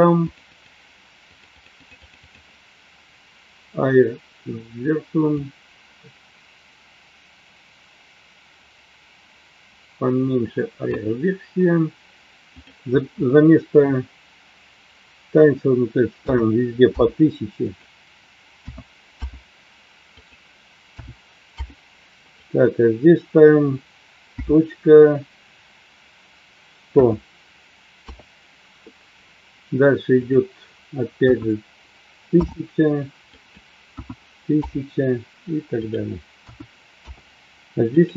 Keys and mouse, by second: 0.2 click, 0.5 click, 1.5 click, 1.7 click, 5.3-11.0 drag, 12.7-16.9 drag, 17.7-19.5 drag, 20.1-21.9 drag, 22.2-28.3 drag, 30.3-32.9 drag, 33.3-34.8 drag, 36.0-37.2 drag, 37.8-38.1 drag.